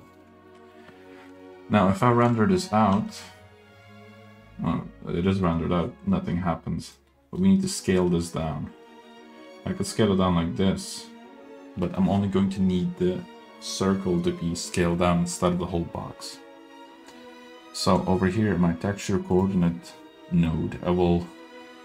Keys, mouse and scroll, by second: 0.5 middle drag, 0.8-1.3 scroll up 1, 1.3 middle click, 2.3 click, 3.1 z, 3.9 z, 6.4-7.0 middle drag, 7.0 scroll up 1, 7.1 middle drag, 7.2 click, 7.2 scroll down 1, 8.0-8.8 middle drag, 9.4 s, 11.7 scroll down 1, 11.8 middle click, 16.5 scroll down 2, 16.8 middle click, 17.2-17.8 scroll up 2, 17.8 middle click, 18.7-19.4 scroll up 1, 19.4 click, 21.3-21.8 scroll up 1.